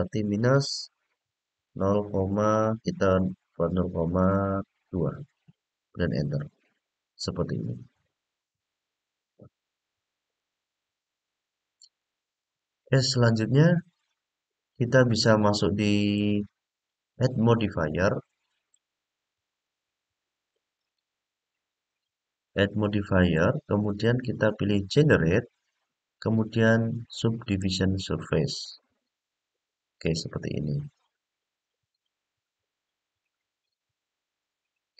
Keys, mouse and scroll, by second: 10.1-11.8 middle drag, 12.2 click, 15.9 click, 17.8 middle click, 19.1 middle click, 23.1-27.6 drag, 33.0-34.9 middle drag.